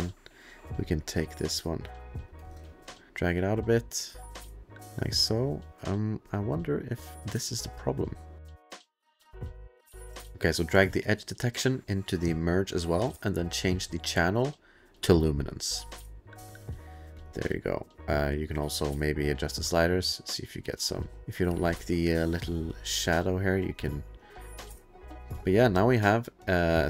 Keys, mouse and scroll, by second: 0.9 click, 2.6 middle click, 2.9 middle click, 3.1 ctrl+z, 3.1 click, 4.9 click, 6.7 click, 7.2 click, 8.4 click, 10.3 click, 11.4 click, 12.8 click, 13.9 click, 15.2 click, 16.1 click, 17.6 click, 17.8 click, 18.0 click, 18.4 click, 18.5 click, 19.6 click, 21.2 click, 21.6-22.7 scroll, 22.7 click, 22.7-23.6 scroll, 24.2 click, 25.3 ctrl+click, 25.4 scroll, 26.4 click, 26.6 click.